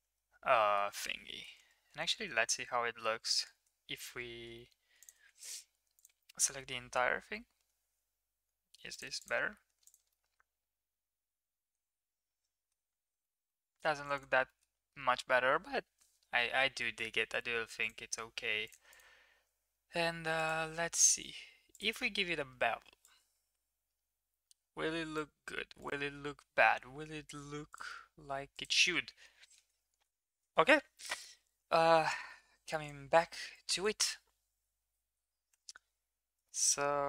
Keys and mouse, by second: 1.5 ctrl+z, 1.9 ctrl+z, 3.5 ctrl+z, 5.9 click, 6.6 middle click, 7.2 e, 9.3 Tab, 9.8 click, 10.0-12.7 middle drag, 13.2 shift+middle drag, 13.5 middle click, 14.0 click, 14.1 click, 14.4 middle click, 17.7 right click, 18.8 click, 20.3-21.7 drag, 23.0-25.1 drag, 25.7-27.8 drag, 28.6-30.1 drag, 32.8-35.5 drag, 35.2 m, 36.4 shift+middle drag.